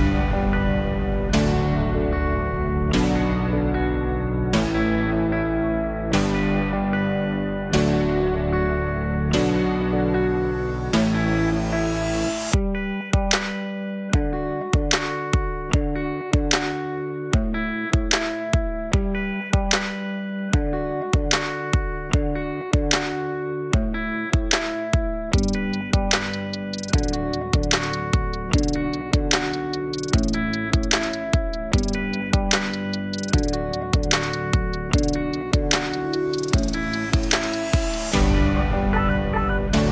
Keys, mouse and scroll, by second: 4.9-5.5 alt+drag, 6.3-6.8 alt+drag, 7.5 shift+d, 8.7 r, 13.2 alt+click, 13.8 s, 14.9-15.5 alt+drag, 16.3-17.2 alt+drag, 17.2-17.5 alt+middle drag, 17.9 alt+click, 22.6 ctrl+alt+KP_0, 24.8 click, 25.3 click, 26.2 KP_0, 28.9 click, 32.3 click, 33.4-37.8 drag.